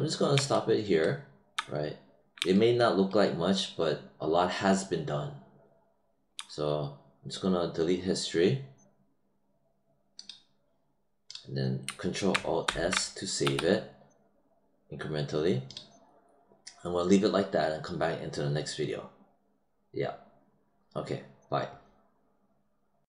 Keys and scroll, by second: 12.6 ctrl+alt+s, 13.4 w.